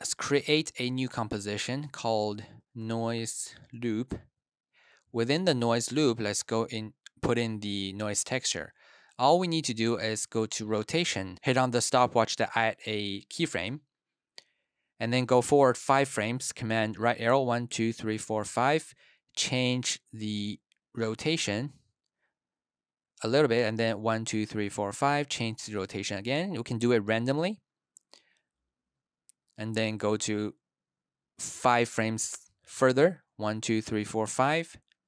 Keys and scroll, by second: 2.4-4.4 typing, 9.7 r, 17.1 super+Right, 17.4 super+Right, 23.8 super+Right, 24.0 super+Right, 33.1 super+Right, 33.4 super+Right.